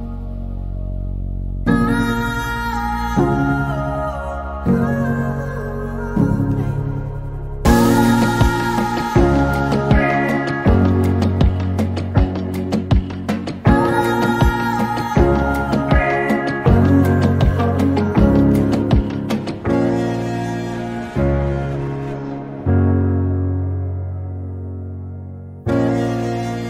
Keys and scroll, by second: 11.6 t, 16.9-17.8 typing, 20.8 typing, 22.4-25.8 typing.